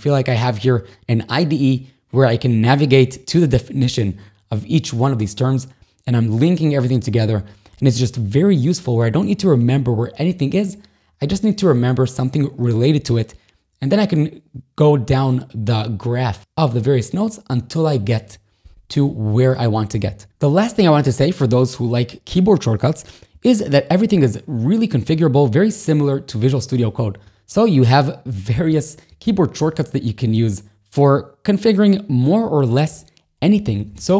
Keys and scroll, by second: 25.0 shift+super+a, 27.1 shift+super+;, 28.6 shift+super+,, 33.7 k.